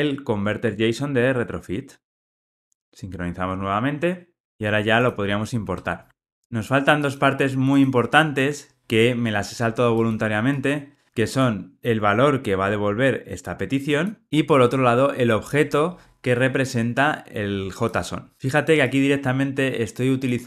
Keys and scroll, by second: 0.6 Tab, 5.6 alt+Return.